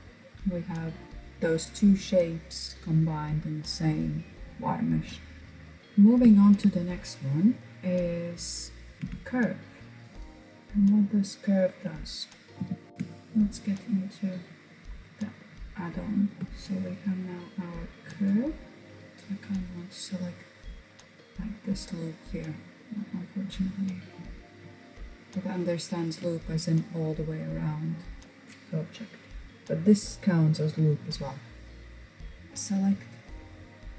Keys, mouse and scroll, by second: 5.3 scroll up 1, 5.4-6.8 shift+middle drag, 6.8 click, 7.5 click, 8.8 Tab, 9.0 Tab, 9.6 click, 11.6 n, 12.4 n, 12.7 Tab, 13.8-14.6 scroll up 2, 15.5 shift+middle click, 16.4 click, 17.3 click, 18.8 click, 21.7-22.6 scroll up 2, 22.6 shift+click, 23.4 shift+click, 23.8 shift+click, 24.3 shift+click, 24.9 shift+click.